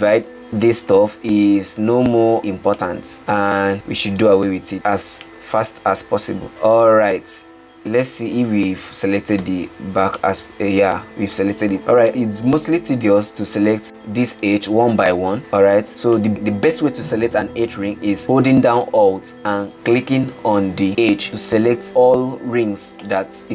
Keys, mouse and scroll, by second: 2.5 middle click, 3.2 alt+click, 4.5 alt+shift+click, 5.8-7.9 middle drag, 9.8 alt+z, 10.9-13.2 middle drag, 13.2 alt+z, 13.7-14.6 middle drag, 14.8 shift+click, 18.3 click.